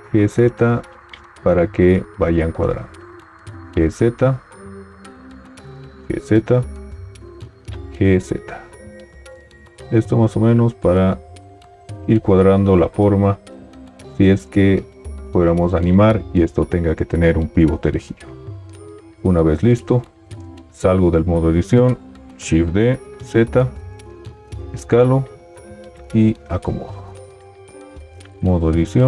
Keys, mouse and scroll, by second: 0.1 g, 0.1 z, 3.4 g, 3.4 z, 5.7 g, 5.7 z, 7.9 g, 7.9 z, 20.5 Tab, 22.4 shift+d, 24.7 s, 25.9 g.